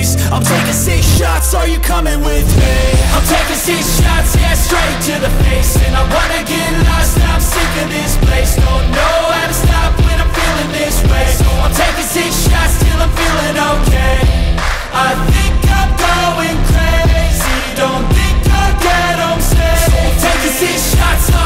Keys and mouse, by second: 3.4 click, 8.2 ctrl+z, 8.6 ctrl+z, 8.8 ctrl+z, 9.1 ctrl+z, 9.3 ctrl+z, 9.7 ctrl+z, 9.9 ctrl+z, 10.2 ctrl+z, 10.4 ctrl+z, 10.7 ctrl+z, 12.4 click, 13.8 r, 15.0 click, 15.9 click, 17.9 click, 17.9 r, 19.1-21.4 drag.